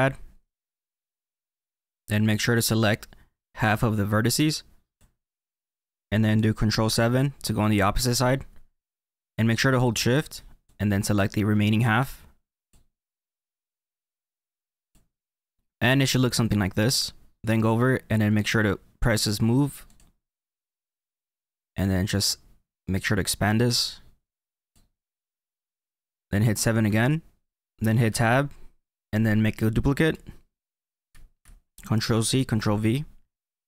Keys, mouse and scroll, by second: 2.5 click, 7.1 ctrl+KP_7, 10.6 shift+click, 13.1 shift+click, 19.8 click, 21.5 click, 26.8 KP_7, 27.5 middle click, 28.0 Tab, 31.0 ctrl+c, 32.5 ctrl+v.